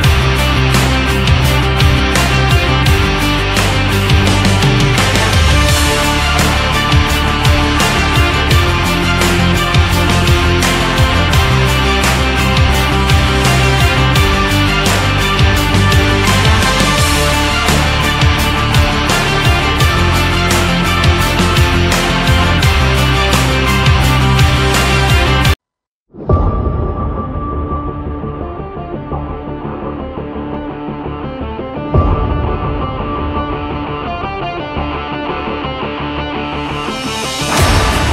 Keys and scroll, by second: 19.1 shift+x.